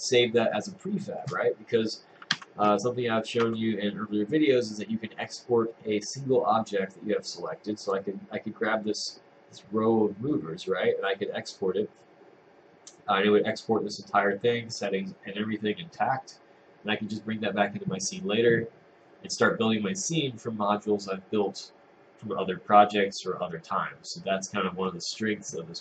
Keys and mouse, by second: 2.4 Tab, 3.2 middle click, 3.4 Tab.